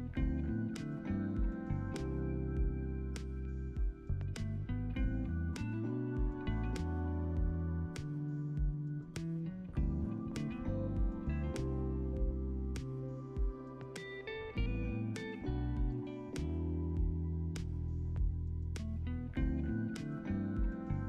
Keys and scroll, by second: 6.9 ctrl+c, 7.2 ctrl+v, 9.5-10.4 typing, 10.8 Return, 13.1 5, 13.3 Return, 15.0-15.9 typing.